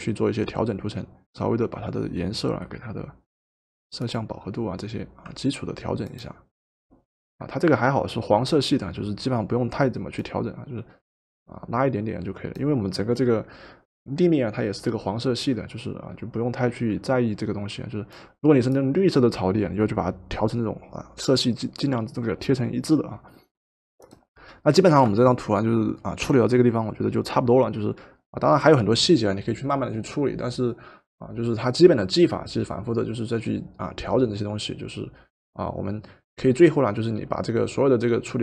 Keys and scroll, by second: 24.9 v.